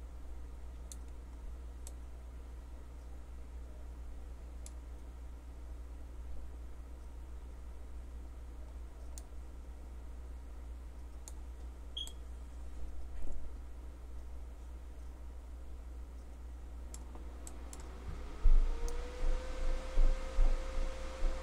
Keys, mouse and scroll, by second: 9.2-11.3 drag, 17.5-20.8 middle drag.